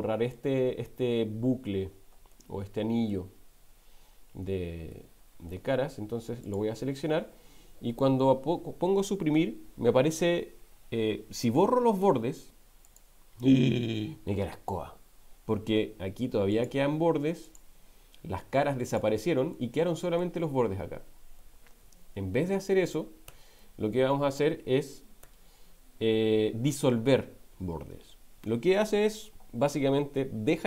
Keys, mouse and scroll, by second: 2.3 middle click, 5.2 middle click, 6.4 alt+click, 9.0 Delete, 16.5 click, 17.5 click, 18.9 click, 19.5 middle click, 21.6 ctrl+z, 22.4 ctrl+z, 22.9 ctrl+z, 23.3 ctrl+z, 25.2 x.